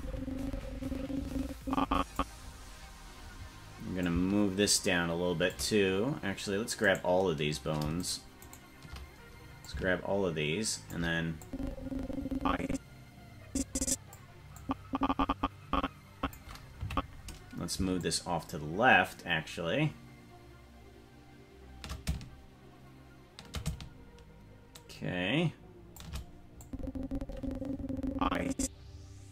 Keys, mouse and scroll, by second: 4.0-5.6 shift+drag, 6.9 right click, 9.6-11.0 shift+drag, 11.4-14.2 drag, 14.6-16.3 drag, 16.8 Left, 18.0-26.0 shift+drag, 26.6-29.3 drag.